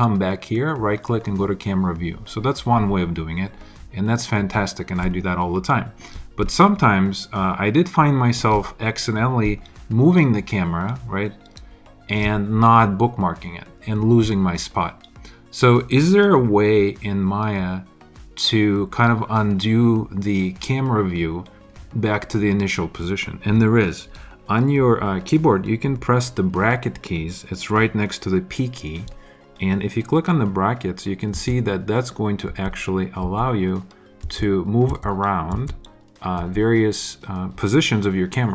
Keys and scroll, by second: 31.3 [, 32.4 ], 34.2 [, 36.3 ].